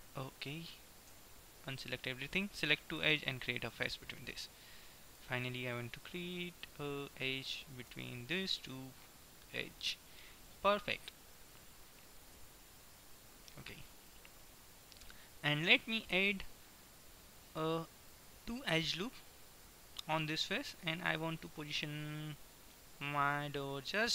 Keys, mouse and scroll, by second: 0.0 f, 1.3 a, 2.1-3.6 right drag, 4.0 f, 8.1 f, 12.5 a, 13.1-14.1 middle drag, 15.5 ctrl+r.